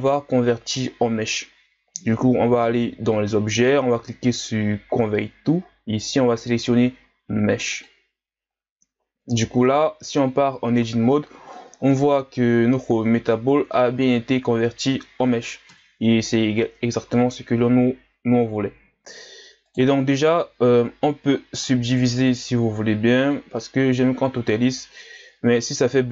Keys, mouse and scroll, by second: 1.2-2.7 scroll down 1, 3.1-9.1 drag, 9.1-10.1 scroll up 5, 10.1 Tab, 10.7-11.4 scroll up 3, 11.4-11.9 scroll down 1, 11.9-15.7 middle drag, 15.7 KP_1, 16.6 Tab, 17.1 a, 17.3-17.8 scroll down 1, 17.8-18.4 scroll up 4, 18.4 scroll down 2, 19.6 right click, 21.5-22.1 drag, 25.0-26.1 drag.